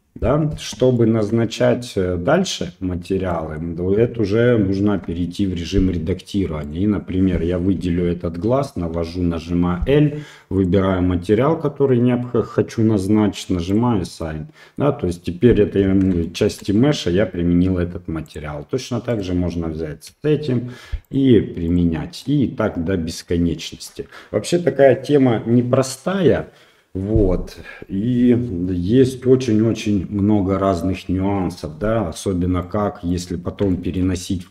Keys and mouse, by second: 1.0 shift+middle drag, 3.4 middle click, 4.9 Tab, 6.6 click, 9.0 l, 10.6 click, 14.2 middle click, 16.3 shift+middle click, 16.8 middle click, 18.3 click, 19.1 click, 20.1 l, 21.0 click, 22.2-23.2 middle drag, 32.6 middle click, 33.7 shift+middle click, 34.2 middle click.